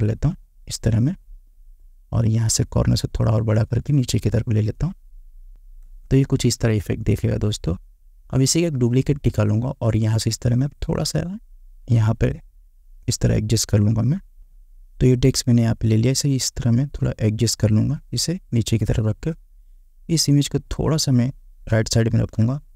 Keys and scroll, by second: 6.0 Return.